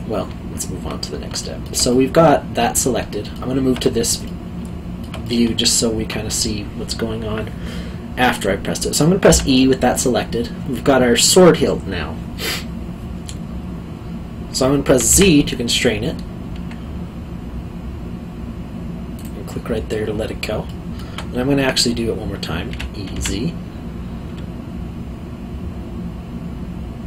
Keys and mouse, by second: 1.4 alt+middle click, 9.3 e, 15.1 z, 19.1 click, 20.6 alt+middle click, 22.7 e, 23.1 z.